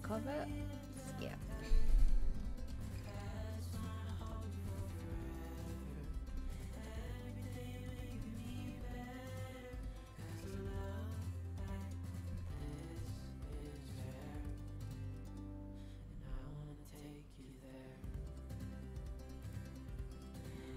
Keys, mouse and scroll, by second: 4.5 z, 5.0 z, 6.0 g, 8.2 ctrl+z, 15.0 click, 16.0 g, 20.4 middle click.